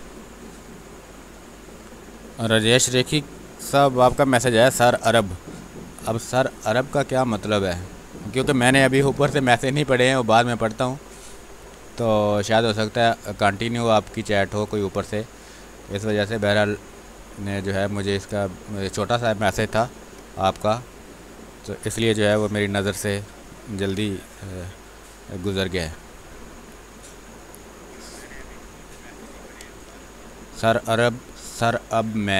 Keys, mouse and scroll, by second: 1.5 alt+click, 2.7 r, 3.3-5.3 drag, 5.3 space, 5.9 space, 7.0 ctrl+click, 8.8 b, 10.2-13.3 drag, 13.5 space, 13.7 click, 14.6 space, 14.8 click, 15.1 space, 16.3-19.5 drag, 19.5 click, 19.7 w, 20.4 shift+click, 21.7 click, 22.7-25.3 drag, 25.3 space, 25.6 click, 26.6 space, 26.9 click, 27.1 space, 29.3 b, 29.5 space, 29.7 click, 30.1 space.